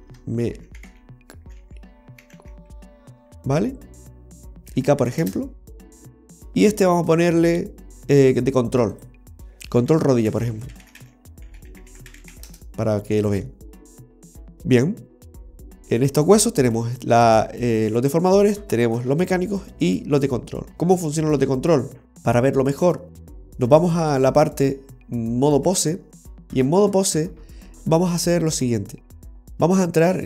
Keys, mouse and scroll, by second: 0.1 BackSpace, 0.2 BackSpace, 7.1 right click, 9.1 click, 12.3 l, 15.7 right click, 16.4 right click, 17.0 right click, 17.8 right click, 18.9 right click, 19.8 right click, 21.8 r, 25.0 click, 27.4-29.8 scroll up 3, 29.8 v.